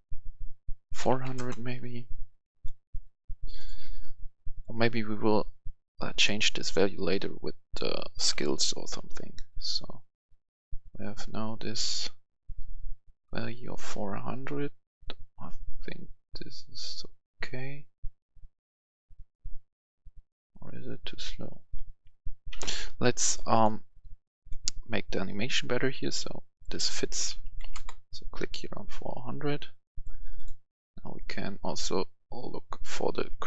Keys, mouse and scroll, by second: 0.8-1.1 typing, 1.3 Return, 2.4 click, 6.9 click, 8.2-10.3 typing, 12.7 typing, 14.3 typing, 22.5 Escape, 23.2 click, 26.4 click, 27.2-27.6 typing, 27.4 click, 27.7 Return, 29.8 click.